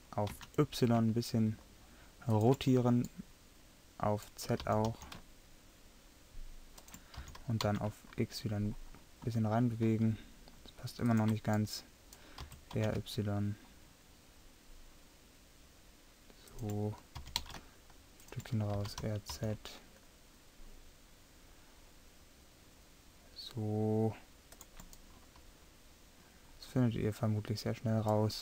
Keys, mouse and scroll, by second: 3.5 middle click, 4.6 r, 7.3 g, 12.5 r, 17.2 g, 18.8 r, 25.1 middle click, 26.1 middle click, 26.7-28.4 middle drag.